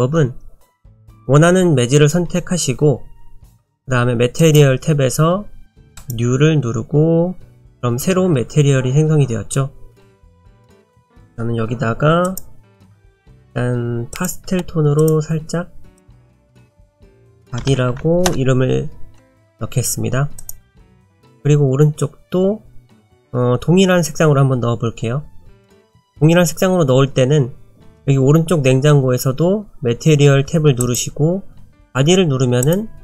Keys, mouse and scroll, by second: 0.9 click, 4.4 click, 6.0 click, 10.8 click, 12.8 click, 17.1 click, 20.4 click, 21.3 click, 27.8 click, 30.8 click.